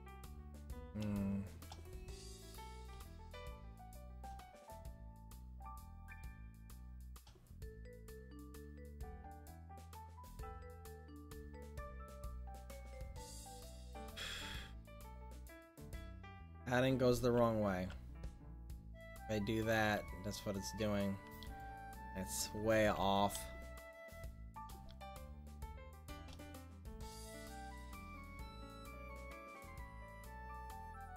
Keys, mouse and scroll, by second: 7.5-11.1 middle drag, 16.6 click, 17.4 ctrl+z, 20.4 click, 22.0 middle click, 23.0 ctrl+z.